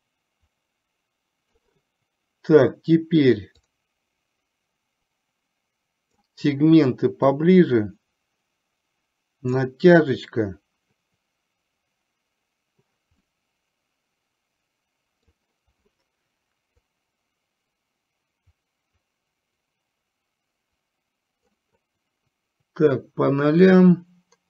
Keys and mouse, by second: 3.8-6.3 drag, 7.6-9.7 drag, 13.4-15.3 middle drag, 16.8-21.6 drag, 23.7-24.4 drag.